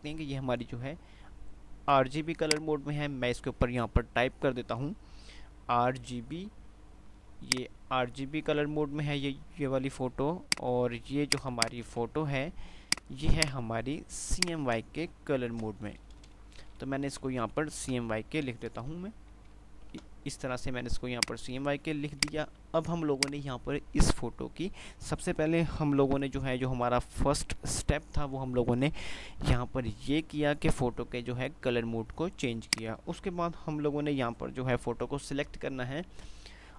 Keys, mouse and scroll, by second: 5.3 ctrl+shift+r, 5.7 ctrl+shift+g, 6.0 ctrl+shift+b, 7.5 ctrl+click, 9.2 ctrl+click, 9.8 ctrl+shift+c, 10.7 ctrl+shift+click, 12.5 ctrl+c, 12.7 ctrl+click, 14.5 ctrl+right click, 15.7 F8, 15.8-19.8 typing, 21.3 click, 22.0 shift+click, 22.5 c, 23.2 click, 32.5 click.